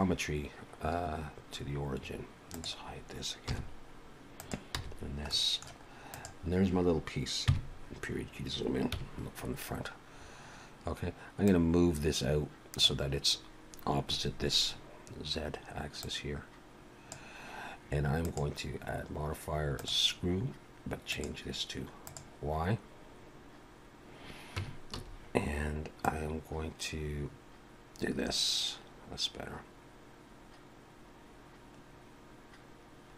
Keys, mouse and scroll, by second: 1.4 scroll up 3, 1.9-2.6 scroll down 4, 2.5 click, 3.5 h, 4.4 click, 4.7 h, 5.3 middle click, 6.1 click, 7.5 KP_Decimal, 8.2-8.9 scroll up 1, 8.9 scroll up 1, 8.9 KP_1, 9.7-11.2 scroll down 5, 11.5 click, 23.3-23.7 scroll up 1, 24.6 Tab, 24.8 a, 26.0 click.